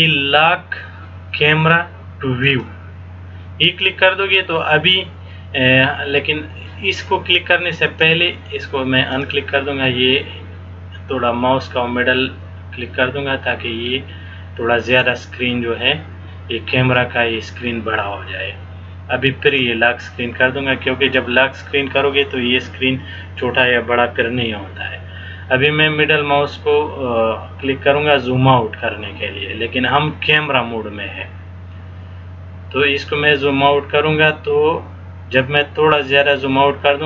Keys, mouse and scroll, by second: 2.6 click, 9.3 click, 10.6 scroll down 1, 11.8 scroll down 1, 14.0-14.5 scroll down 1, 15.6 scroll down 1, 19.6 click, 26.8 scroll up 1, 27.4-28.2 scroll up 4, 28.7-29.2 scroll up 2, 29.8 scroll up 1, 32.6 scroll up 1, 33.3-34.4 scroll up 2, 34.7 scroll up 1, 36.1-37.0 scroll up 1.